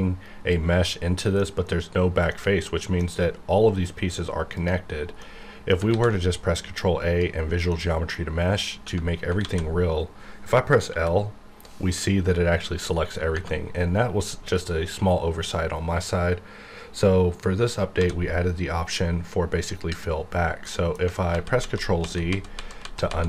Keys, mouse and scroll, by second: 1.0-2.3 middle drag, 2.3-4.5 middle drag, 4.5 click, 4.9 scroll down 1, 5.2 middle click, 5.9 ctrl+a, 6.8 click, 7.7 middle click, 8.8 Tab, 9.4 alt+a, 10.9 l, 18.0 d, 19.6 click, 20.6 middle click, 20.9 scroll down 1, 21.3 ctrl+z.